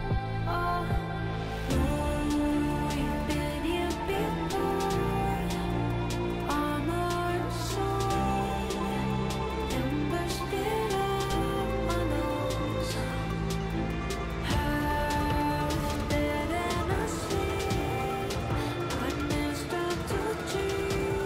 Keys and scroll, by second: 1.2 ctrl+z, 8.5 g.